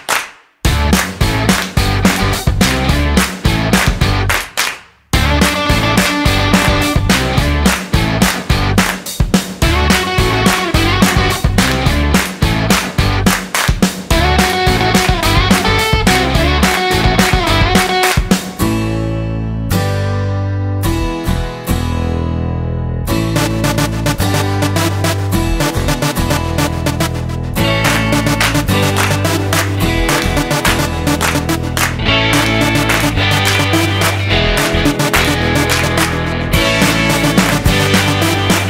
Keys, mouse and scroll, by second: 2.0-3.0 scroll down 8, 3.0 middle click, 7.2 s, 13.9-14.8 scroll up 7, 14.8 middle click, 16.7 click, 18.6 right click, 19.7 middle click, 21.2 click, 21.8 click, 24.8 middle click, 26.4 shift+middle click, 27.2 middle click, 28.5 middle click, 29.6 shift+middle click, 30.4 middle click, 32.0 shift+middle click, 32.9 middle click, 35.4 shift+middle click, 38.0 middle click.